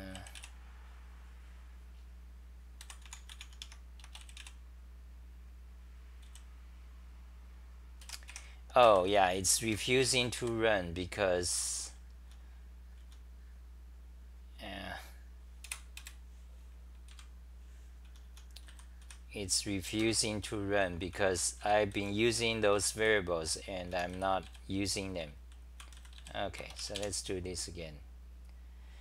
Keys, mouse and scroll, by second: 2.8 p, 3.6 Home, 3.6 u, 6.2 w, 8.0-10.0 typing, 9.7 ctrl+g, 11.7-13.0 typing, 15.6 super+w, 16.2 shift+super+t, 17.1 super+=, 18.4-26.6 typing, 20.0 ctrl+g.